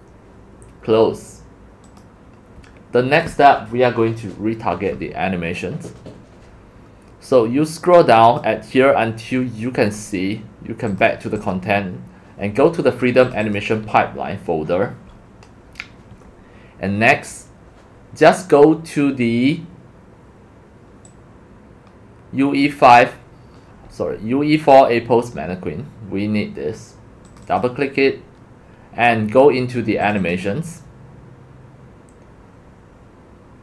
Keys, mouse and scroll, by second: 1.8 click, 6.8-7.2 drag, 7.7-8.4 drag, 8.4-8.9 drag, 11.7 click, 13.3 click, 13.4 click, 21.1-22.6 drag, 27.3 click, 27.5 click, 30.0 click, 30.2 click.